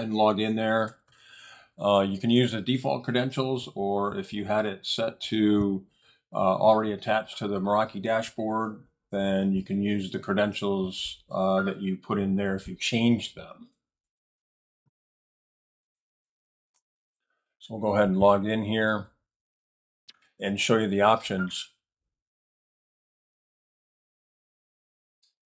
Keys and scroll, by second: 0.3-1.5 typing, 1.8 Tab, 13.7-17.3 typing.